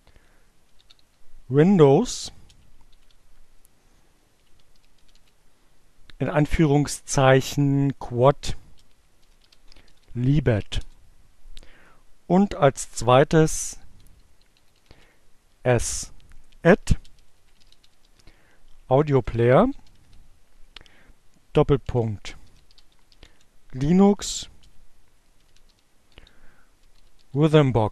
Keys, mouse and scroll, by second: 0.0-1.2 typing, 2.7-4.3 typing, 8.3-9.5 typing, 13.2-14.1 typing, 16.0-27.9 typing.